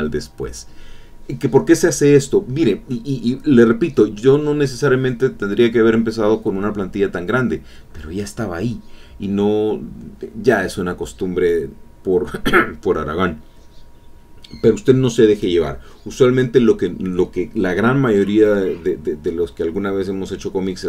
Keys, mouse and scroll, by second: 4.8-7.5 drag, 15.8 click, 18.2-20.8 drag.